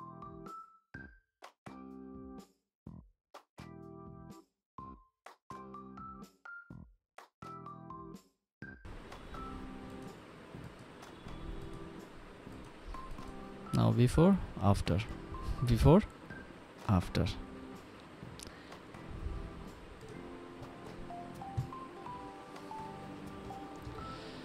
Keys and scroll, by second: 0.0-0.5 typing, 0.5 Return, 0.6 ctrl+alt+d, 0.6 Return, 2.3 ctrl+d, 3.9 Escape, 4.7 ctrl+alt+d, 4.9 1, 5.1 ctrl+alt+d, 5.1 Return, 8.3 p, 9.1 ctrl+Return, 9.2 5, 9.4 ctrl+j, 10.9 Return, 19.9 ctrl+s.